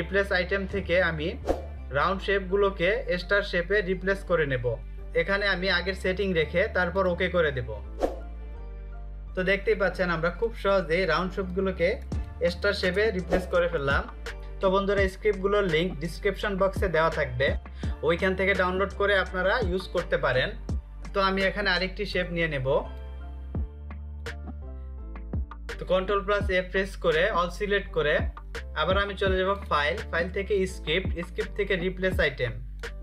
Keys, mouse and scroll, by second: 4.6 click, 6.3 click, 13.4 0, 14.3 click, 21.0 click, 25.7 ctrl+a, 28.7 click, 32.0 click.